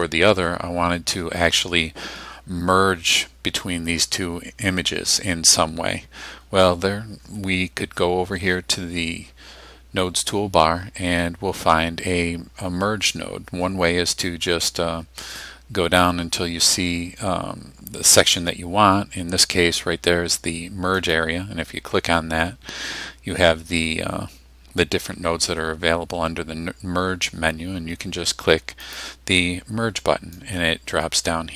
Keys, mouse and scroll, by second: 21.1 click, 28.9 click, 30.4-31.5 drag.